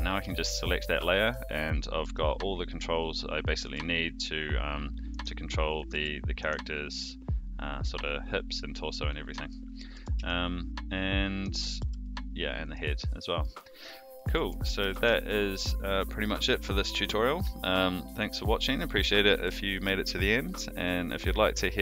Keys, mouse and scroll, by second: 0.3 shift+middle drag, 0.8-1.3 middle drag, 1.7 click, 2.0 g, 3.4 click, 3.6 r, 5.7 click, 5.9 r, 8.7 click, 9.1-9.5 middle drag, 9.9 r, 11.8 g, 13.1-13.4 middle drag, 14.2 a, 14.6 alt+g, 14.9 alt+r.